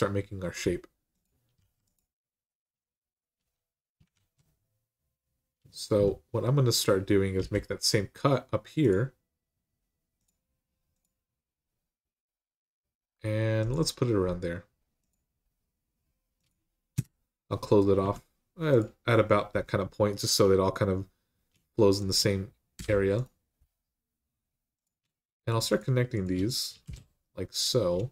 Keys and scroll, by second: 1.4 x, 3.9 ctrl+z, 7.2 k, 16.7 Return, 17.8 1, 22.5 m, 26.6 shift+r.